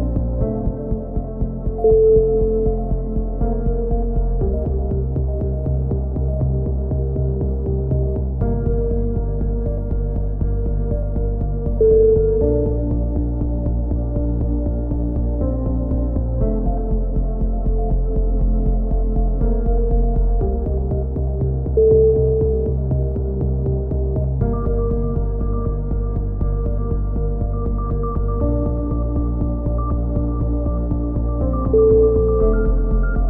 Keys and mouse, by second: 1.2-4.1 middle drag, 4.4-6.6 drag, 6.6 KP_3, 6.8 z, 8.2 c, 9.0-11.4 right drag, 9.2 z, 11.4 z, 12.0 click, 13.8 c, 14.4 click, 14.9 middle click, 15.4 click, 15.9 middle click, 16.4-17.4 drag, 17.8 middle click, 18.0 z, 18.4 click, 19.2 click, 19.2 z, 19.5 middle click, 19.9 click, 21.1 a, 21.2 z, 21.8 Tab, 22.4-23.6 drag, 25.3 KP_3, 25.6 z, 25.9 Tab, 26.5 z, 26.8 z, 28.6 ctrl+r, 30.3-31.3 middle drag, 30.8 c, 32.4-33.2 right drag.